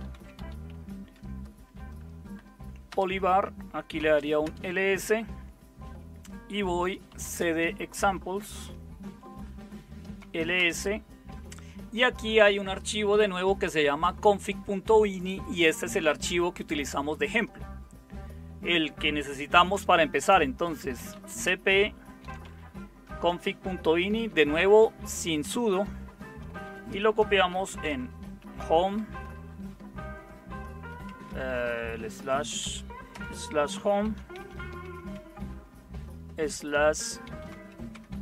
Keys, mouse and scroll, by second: 0.0-1.6 typing, 2.9 Tab, 3.9-4.9 typing, 6.8-11.0 typing, 20.7-22.9 typing, 26.6-28.4 typing, 28.9 Tab, 31.0-35.1 typing, 37.2 Tab, 37.3-38.2 typing.